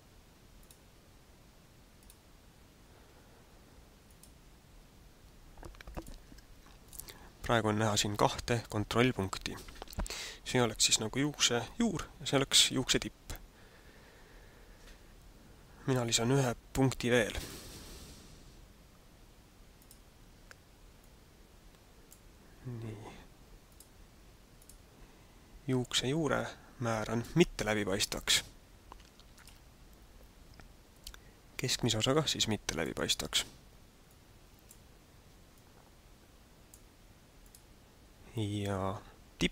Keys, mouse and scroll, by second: 0.5 click, 2.0 click, 4.0 click, 5.9 click, 6.7 click, 17.3 click, 19.8 click, 21.0 click, 23.6 click, 24.6 click, 29.3 click, 31.8 click, 33.1 click.